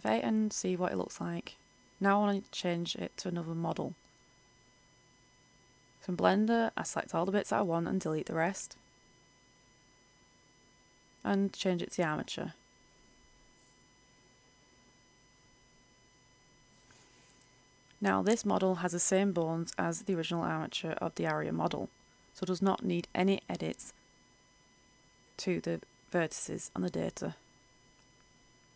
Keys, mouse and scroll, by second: 0.3 click, 1.0 Return, 3.6 right click, 4.9 h, 5.3 right click, 5.6 h, 6.0 a, 6.7 a, 7.7 middle click, 8.7 alt+h, 9.3-10.4 right drag, 10.7 click, 12.6 right click, 13.4 click, 14.4-17.1 middle drag, 17.1-18.6 scroll down 1, 18.6 right click, 19.4-20.1 scroll up 1, 20.1 a, 22.5 right click, 24.0 click, 25.7 right click, 26.2 r.